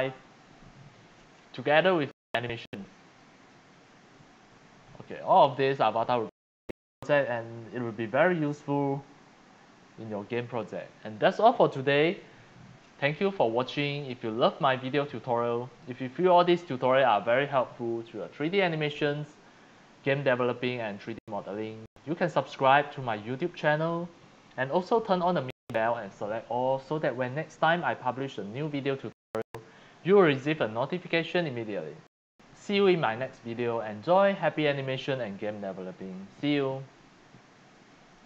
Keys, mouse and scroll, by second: 2.0-3.2 drag, 4.2 click, 9.1 click, 28.3 click, 31.3 click, 36.6 scroll down 1, 38.1 click.